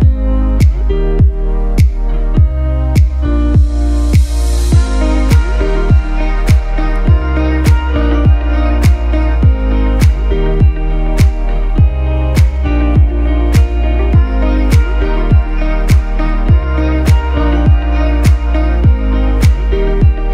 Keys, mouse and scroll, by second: 2.6-3.5 typing, 2.9 click, 3.4 click, 3.7 click, 4.9 right click, 5.8 click, 6.7 z, 6.9 click, 7.1 space, 7.2 click, 13.2 ctrl+c, 13.6 ctrl+b, 15.1 click.